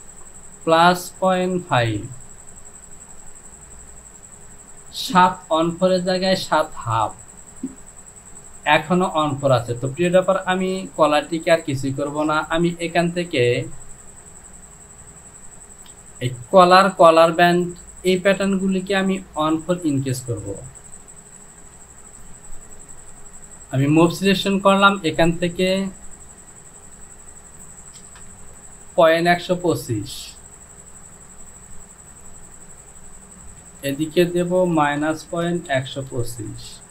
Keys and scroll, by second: 10.9 j, 15.8 shift+i, 21.8 KP_7, 28.0 KP_0, 28.4 Down, 33.8 Down, 34.8 KP_Subtract, 35.3 KP_Decimal, 35.8 KP_1, 36.1 KP_2, 36.3 KP_5, 36.6 Down.